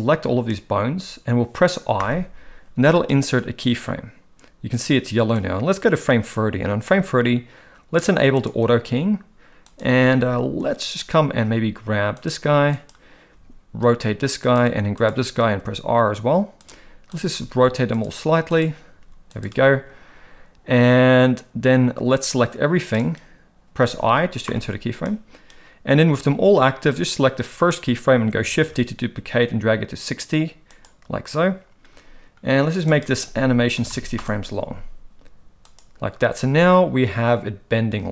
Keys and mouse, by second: 5.4-6.9 drag, 8.4-9.8 drag, 15.1-15.8 drag, 18.6 click, 22.3-23.0 drag, 27.0-27.7 drag, 32.9-34.2 drag, 35.6 click.